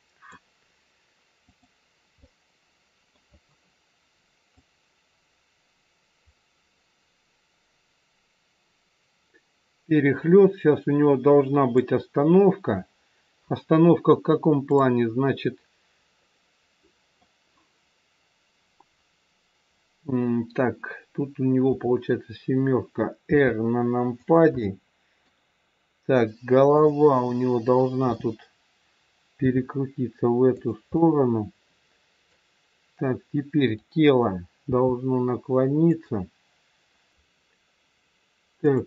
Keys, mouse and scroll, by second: 1.5 click, 2.2 middle click, 4.4 click, 14.7 click, 15.5-16.1 scroll up 2, 16.1 middle click, 21.7 KP_7, 23.2 r, 24.7 middle click, 26.6 click, 28.0 KP_7, 29.4 r, 31.0 middle click, 33.6 click, 34.6 r, 38.6 click.